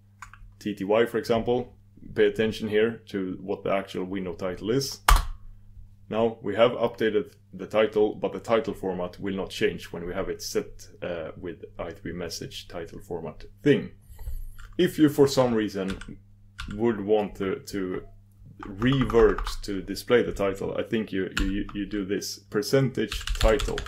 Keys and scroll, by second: 5.1 ctrl+super+Return.